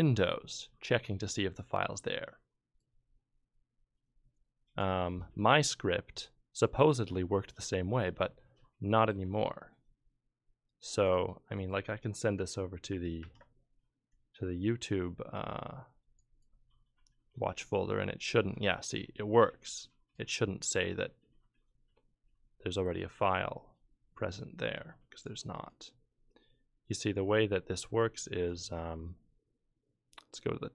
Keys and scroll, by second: 13.2 ctrl+F12.